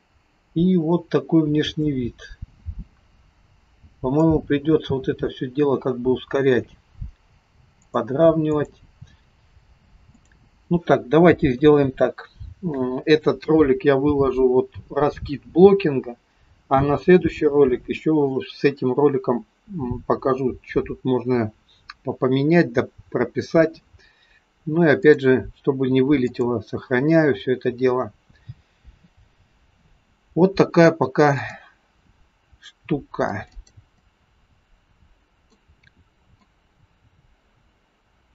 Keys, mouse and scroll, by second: 0.8-1.1 scroll up 1, 1.9 middle click, 7.9 click, 8.7 click, 10.3 click, 11.5 KP_3, 25.0 click, 31.5 click, 33.3 click, 33.5 click, 34.0 click, 36.6 click.